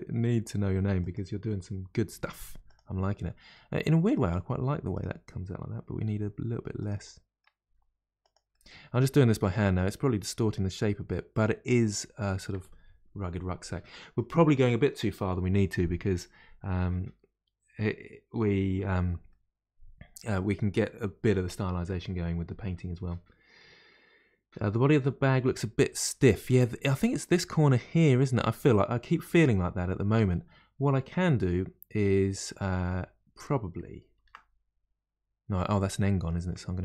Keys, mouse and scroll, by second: 2.1 2, 2.6 click, 3.5-4.9 middle drag, 4.9 click, 5.9 g, 7.1 middle click, 7.6 g, 8.5-10.4 middle drag, 10.4 g, 11.7-16.8 middle drag, 19.2-22.3 middle drag, 25.8-30.3 middle drag, 34.1 ctrl+r, 36.1-36.8 middle drag.